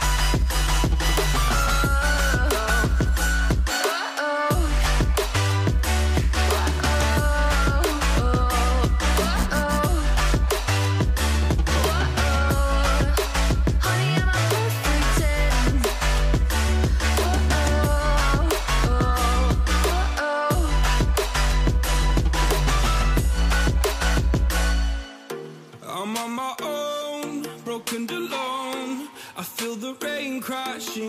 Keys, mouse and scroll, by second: 0.7 double click, 4.0 alt+click, 4.0 alt+double click, 4.5 typing, 5.4 ctrl+t, 6.2 Return, 6.6 shift+click, 7.4 shift+right click, 7.6 shift+click, 8.8 Down, 9.4 Right, 9.7 Up, 10.0 Left, 10.1 Left, 10.3 v, 14.2 v, 22.4 alt+click, 24.8 Return, 28.5 v, 29.3 ctrl+t.